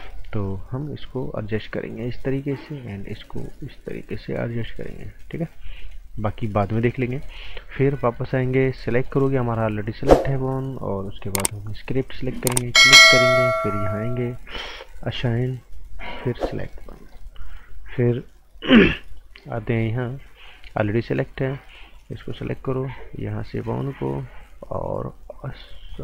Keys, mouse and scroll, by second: 0.8 click, 2.3 right click, 3.3 click, 5.7 scroll down 1, 5.8 right click, 8.0 alt+right click, 11.6 click, 13.1 right click, 13.7 click, 16.8 right click, 17.9 alt+right click, 21.4 click, 25.9 click.